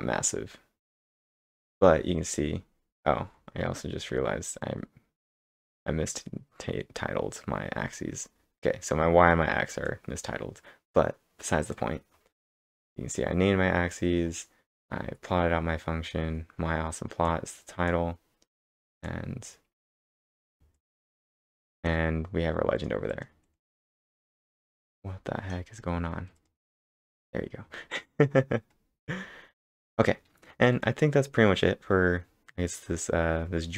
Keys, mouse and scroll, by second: 0.3 scroll down 1, 0.7 scroll down 3, 1.1 scroll up 2, 1.7 scroll up 3, 2.9 scroll down 2, 3.3-3.7 scroll up 10, 3.3-5.1 typing, 4.2 scroll down 2, 7.3-8.0 typing, 7.5-8.4 scroll down 12, 9.9-13.8 drag, 13.5-14.7 scroll up 8, 15.0 scroll down 3, 15.2-15.7 scroll up 2, 17.3-21.3 drag, 20.6-23.1 middle drag, 21.3 click, 22.8 click, 23.1 click, 25.8 scroll up 1, 26.4 click, 26.8 click, 29.0-29.7 typing, 29.0 scroll down 2, 31.3-31.8 scroll up 5.